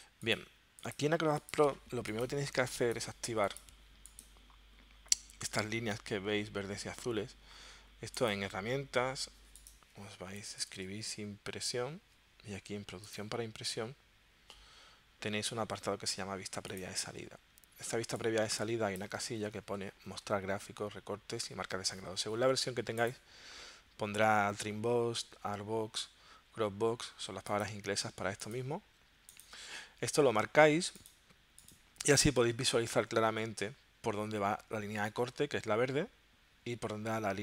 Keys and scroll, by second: 10.4-11.4 typing.